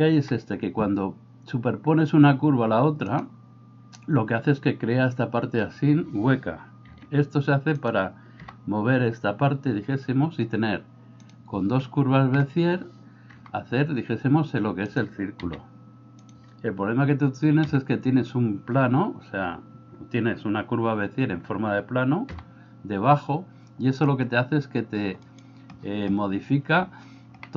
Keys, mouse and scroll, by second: 0.2 g, 6.9 s, 8.5 g, 12.4 middle click, 13.3 g, 15.5 s, 17.7 f, 22.3 g, 27.4 middle click.